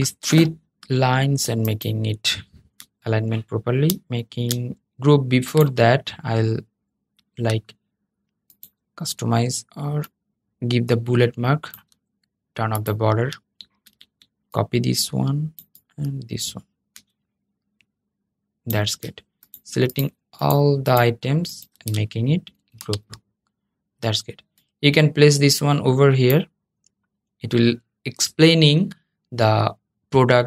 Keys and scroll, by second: 22.3 super+g.